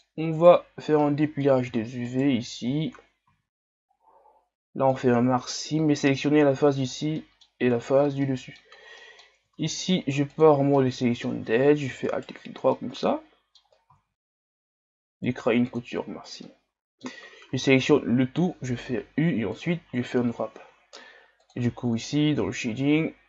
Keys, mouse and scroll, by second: 0.4 right click, 0.8 scroll down 1, 1.0-2.1 middle drag, 2.1 shift+right click, 5.0 ctrl+e, 5.5-10.4 middle drag, 10.4 ctrl+Tab, 10.8-12.1 middle drag, 12.1 alt+right click, 12.8-15.8 middle drag, 15.8 ctrl+e, 16.4-17.5 middle drag, 17.5 a, 17.8 a, 19.7 u, 21.7-22.7 drag, 22.7 shift+scroll down 3.